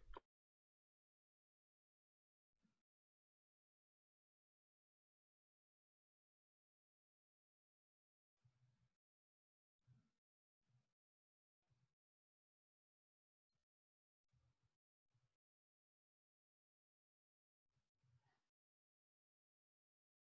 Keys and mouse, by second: 0.3 ctrl+alt+shift+w.